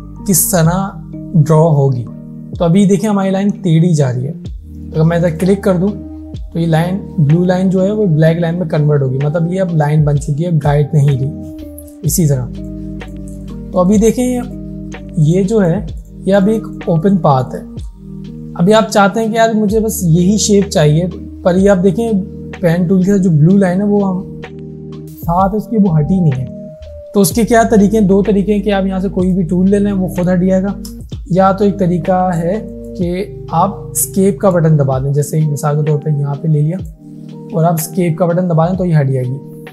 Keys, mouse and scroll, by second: 5.4 click, 12.0 click, 29.3 click, 31.2 ctrl+z, 32.4 click, 36.8 click.